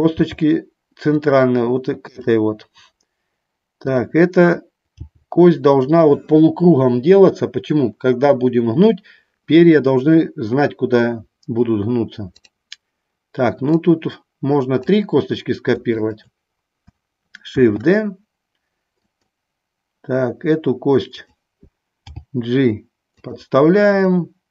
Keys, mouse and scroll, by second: 0.8 g, 5.0 g, 5.9 click, 12.6 click, 13.9-15.2 drag, 16.1 shift+click, 17.7 shift+d, 19.2 click, 22.3 g.